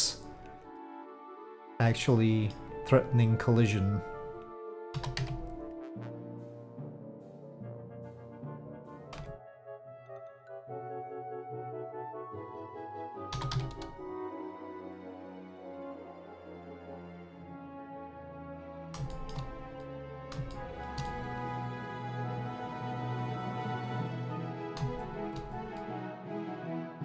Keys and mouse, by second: 1.7-2.6 middle drag, 3.2-4.3 drag, 4.9 s, 8.6 middle click, 9.2 shift+Tab, 9.3 middle click, 10.5-12.5 drag, 13.3 s, 16.2-18.2 drag, 18.6 middle click, 19.1 shift+middle click, 20.0 middle click, 20.6 shift+middle click, 21.0 middle click, 22.9 middle click, 24.5 click, 25.8 middle click, 26.7-27.0 drag.